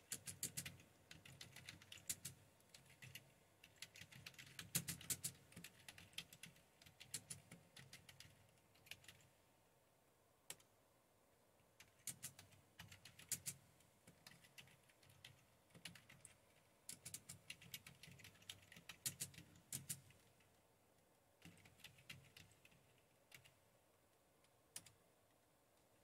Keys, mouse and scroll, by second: 0.0-10.5 typing, 11.8-19.9 typing, 21.2-23.4 typing, 24.6-25.3 typing.